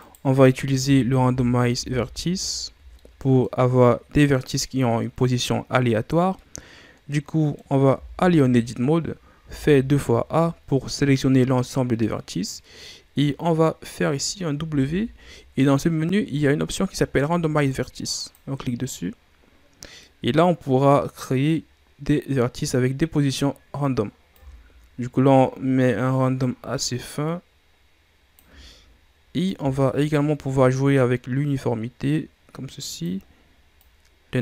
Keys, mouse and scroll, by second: 0.0 right click, 0.8 Tab, 1.2 a, 1.7 a, 2.5-2.9 ctrl+scroll up 2, 2.9 middle click, 3.7-6.3 scroll up 1, 6.3-7.8 middle drag, 7.8 a, 9.3 a, 14.6 w, 19.2-20.0 scroll down 2, 20.0-21.8 middle drag, 21.8-24.3 scroll up 1, 24.3-27.3 drag, 29.4-32.4 drag, 33.8-34.4 drag.